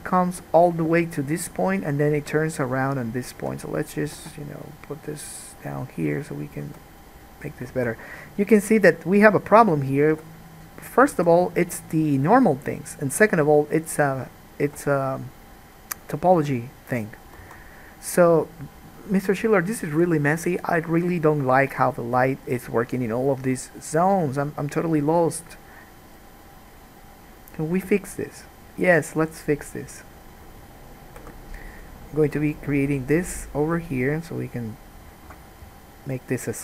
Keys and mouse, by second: 4.3 g, 6.3 middle click, 6.3 right click, 6.8 g, 8.0 alt+a, 9.5 middle click, 9.5 right click, 10.3 g, 11.3 alt+a, 12.1 middle click, 12.2-15.5 drag, 14.8 g, 16.2 middle click, 16.6 g, 17.7 alt+a, 31.3 k.